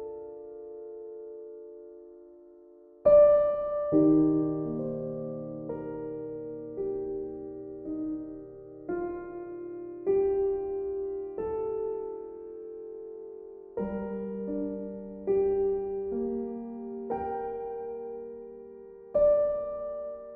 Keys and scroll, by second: 1.4 ctrl+z, 6.3 ctrl+z, 15.3 e, 16.6 e.